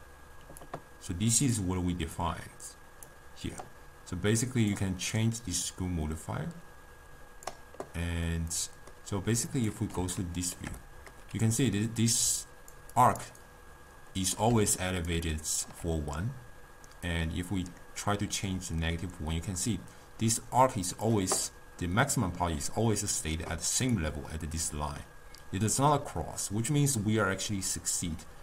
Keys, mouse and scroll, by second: 5.7-8.3 drag, 8.3-9.5 middle drag, 9.5 click, 10.2-12.3 ctrl+middle drag, 12.3-15.7 typing, 12.5 click, 13.0 click, 13.5 right click, 14.8 click, 15.3 drag, 17.1-20.1 drag, 23.6 d, 24.1 click, 24.7 d, 26.8-28.4 drag.